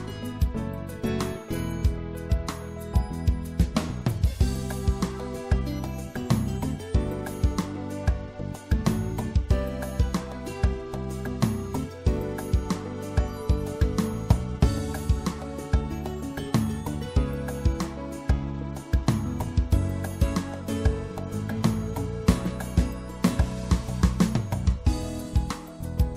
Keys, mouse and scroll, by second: 2.1 middle click, 11.6-16.5 middle drag, 16.5-18.1 drag, 18.1 right click, 18.3 middle click, 18.4-20.9 drag, 21.7-23.9 middle drag, 23.9-26.1 drag.